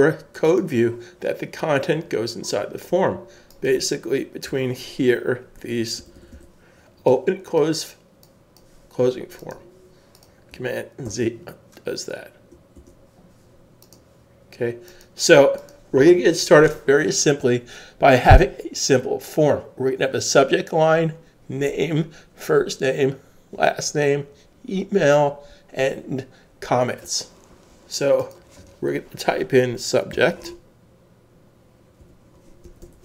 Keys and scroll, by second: 4.5 Return, 6.0-7.9 typing, 11.0 super+z, 30.1-30.4 typing, 31.7-33.0 typing.